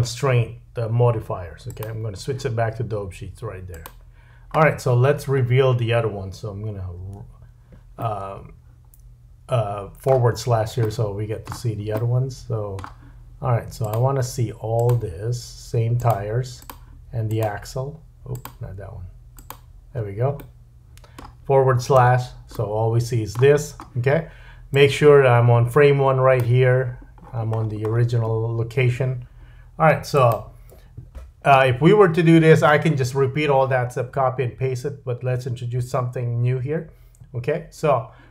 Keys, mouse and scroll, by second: 7.0 /, 8.0 middle click, 10.3-10.8 scroll down 2, 10.8 middle click, 12.0 middle click, 13.8 shift+click, 14.8 shift+click, 15.9 shift+drag, 16.6 shift+click, 17.2 shift+click, 18.3 shift+click, 19.3 shift+click, 20.3 middle click, 22.0 /, 22.5 middle click, 23.6-24.7 scroll up 1, 24.7-26.8 drag, 26.6-28.3 scroll up 11, 28.3-30.1 scroll down 1, 30.1 scroll down 1, 30.2 click.